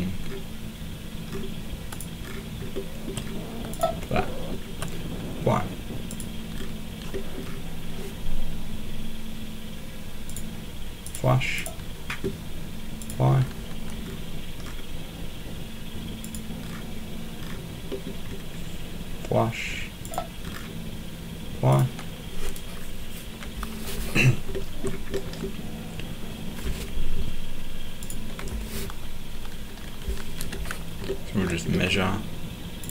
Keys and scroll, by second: 30.4 m.